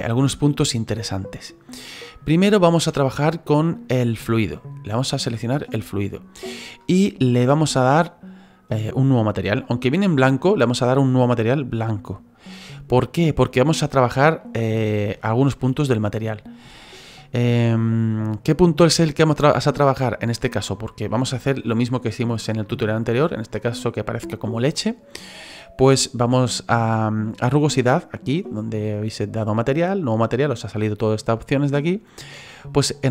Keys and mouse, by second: 2.7 shift+middle click, 5.0 right click, 11.1 click, 13.7 middle click, 14.4 middle click, 15.2 shift+middle click, 16.8 shift+middle click, 17.2 middle click, 19.0 shift+middle click, 19.7 middle click.